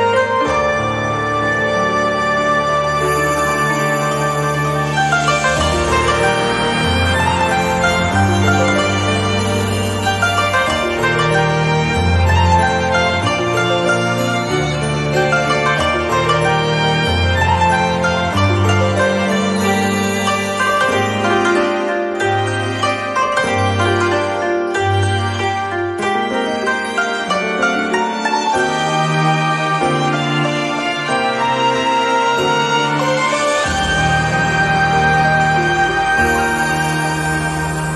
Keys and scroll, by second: 5.1 ctrl+c, 15.3 ctrl+z, 18.7 z, 25.6 ctrl+z.